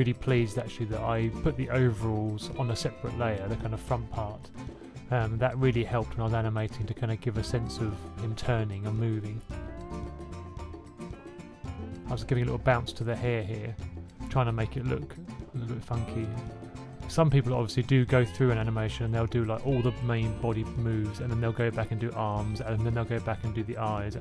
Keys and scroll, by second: 2.4-3.5 typing, 3.9 Left, 4.6-6.9 typing, 8.3 2, 8.7 super+z, 8.7 super+z, 10.8 1, 10.9 1, 12.0-13.5 typing, 16.1 typing, 19.9 F6, 20.3 F6, 20.4 F6.